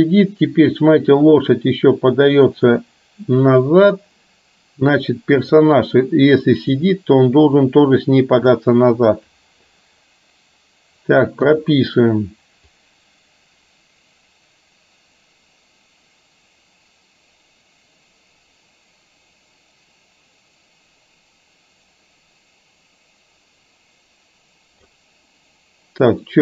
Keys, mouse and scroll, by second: 5.6 drag, 7.0-8.6 drag, 12.9-25.1 drag.